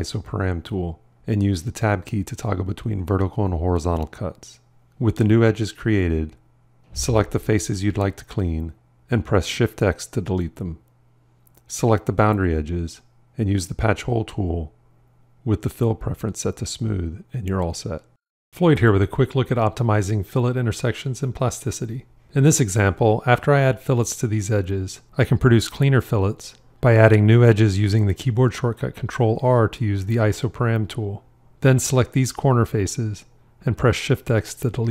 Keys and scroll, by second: 10.6 shift+x, 28.9 ctrl+r.